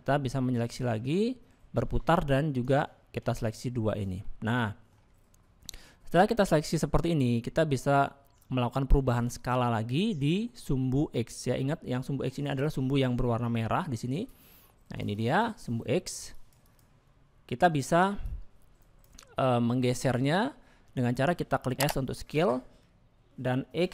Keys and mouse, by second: 2.4 middle click, 4.5 middle click, 6.6 middle click, 10.2 shift+middle click, 12.6 click, 14.5 click, 15.1 click, 16.3 click, 16.6 click, 18.2 ctrl+click.